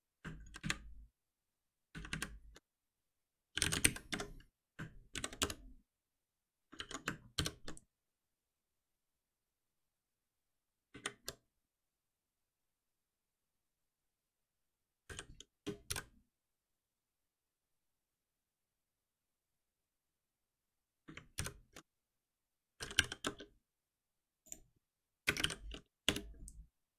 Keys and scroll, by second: 0.5 ctrl+shift+Up, 4.1 Escape, 5.1 alt+Delete, 7.3 shift+F10, 15.5 Return, 16.2 Return, 17.7 Escape, 21.4 ctrl+alt+m, 26.0 Return.